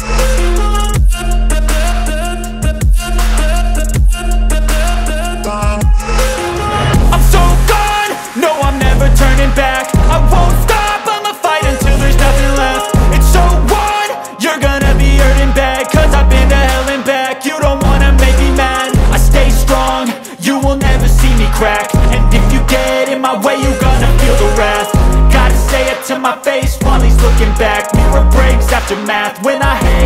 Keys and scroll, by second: 2.4 b, 2.8 Escape, 13.8 alt+c, 13.9 alt+w, 14.2 p, 15.3 shift+Page_Up, 16.2 shift+Page_Down, 16.6 F4, 17.0 Escape, 20.8 Delete, 24.1 shift+F2, 26.2 F3, 27.0 F2.